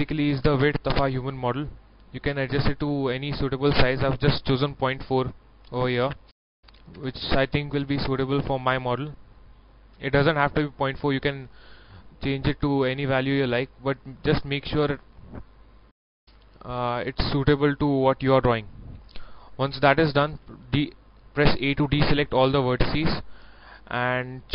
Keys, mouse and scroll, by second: 4.5 KP_Decimal, 5.8 KP_4, 8.0 middle click, 8.7 scroll up 1, 10.2-18.7 middle drag, 20.4 a, 22.0 middle click, 22.9 scroll up 1, 23.7 middle click.